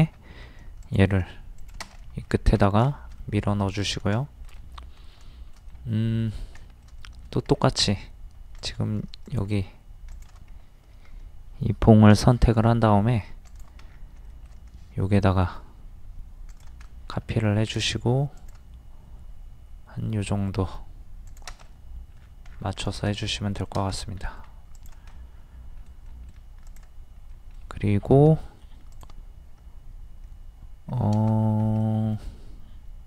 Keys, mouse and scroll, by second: 0.9 click, 2.0 middle click, 2.3 scroll down 1, 3.2 middle click, 3.6-3.9 scroll down 1, 4.2 shift+middle click, 5.7 middle click, 6.6 shift+middle click, 7.5-7.9 scroll up 1, 8.6 click, 9.2 shift+click, 10.1 shift+click, 12.1 m, 13.5 ctrl+click, 13.9-14.2 scroll down 1, 16.5 click, 16.9 middle click, 17.4-17.7 scroll up 1, 18.4 click, 21.7 middle click, 22.2 scroll down 1, 22.8 middle click, 24.8 click, 25.1 middle click, 26.7 click, 27.3 middle click, 28.9 click, 30.9-31.3 scroll up 1, 31.5 t, 31.8 middle click.